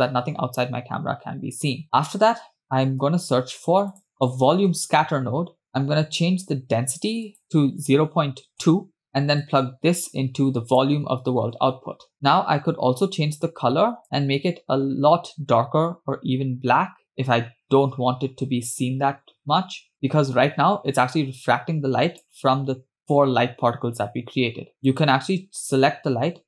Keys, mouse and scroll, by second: 1.5 scroll up 1, 3.9 shift+a, 7.3-9.0 drag, 10.0-11.8 drag, 12.1 click, 23.4-24.3 scroll up 2, 24.9 click.